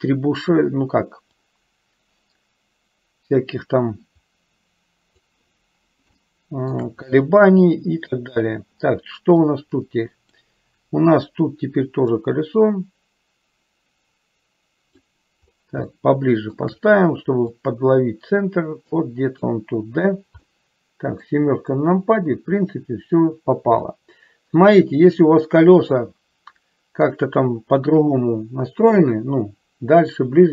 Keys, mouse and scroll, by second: 1.6-5.3 drag, 6.4 shift+middle click, 9.6 click, 12.5-15.2 drag, 16.2 shift+middle click, 17.6-19.6 drag, 20.7 middle click, 24.0-27.4 middle drag.